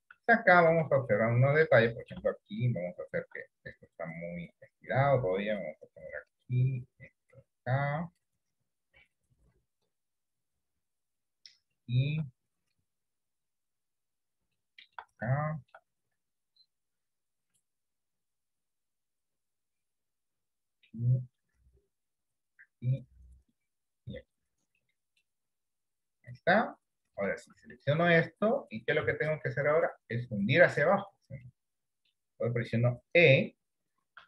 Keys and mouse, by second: 0.6 middle click, 1.9 middle click, 4.1-5.6 drag, 6.9-8.2 drag, 10.5 click, 12.0 shift+middle click, 13.4 click, 14.9 shift+middle click, 15.4 shift+middle click, 17.3 click, 19.0 click, 21.5 click, 23.5 click, 24.9 middle click, 26.3 click, 27.9 shift+middle click, 29.4 middle click, 31.6 middle click, 32.8 middle click.